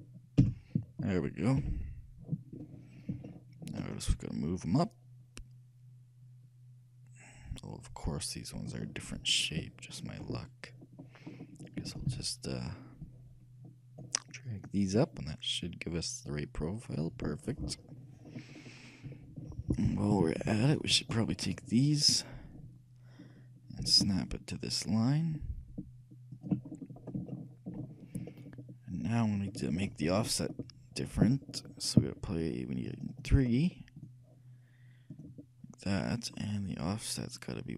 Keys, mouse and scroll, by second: 1.7 KP_3, 3.4-4.8 middle drag, 4.8-6.7 shift+drag, 9.4-13.4 shift+middle drag, 11.9 shift+a, 12.2 b, 15.1-16.9 drag, 17.8 middle click, 18.4 scroll down 1, 18.5-20.2 middle drag, 20.2 a, 20.6 b, 23.9 g, 26.8 middle click, 27.5 shift+middle click, 30.5-32.9 shift+middle drag, 32.9-37.7 drag.